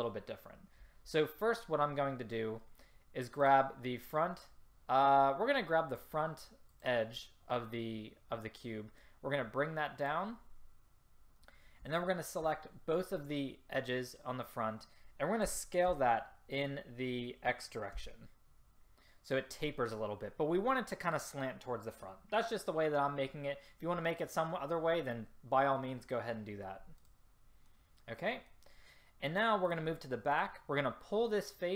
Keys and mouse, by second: 0.2-3.6 middle drag, 3.6 click, 5.1-6.8 drag, 9.1-10.9 drag, 15.6 s, 27.9 middle click, 29.8-30.4 drag.